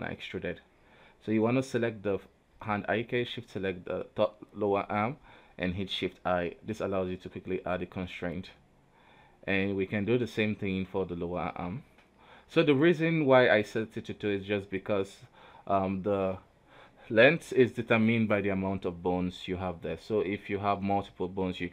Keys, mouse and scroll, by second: 0.1 KP_3, 0.8-1.4 scroll up 2, 1.6 shift+middle click, 2.0-2.8 scroll down 2, 2.8 right click, 3.6 shift+right click, 4.7 shift+i, 6.9 click, 8.3-9.5 drag, 9.5 right click, 9.7 g, 12.1 right click, 13.9 Tab, 14.3 q, 15.0 w, 15.8 Tab, 16.4 right click, 17.6-19.1 drag, 19.1 right click, 20.9 right click.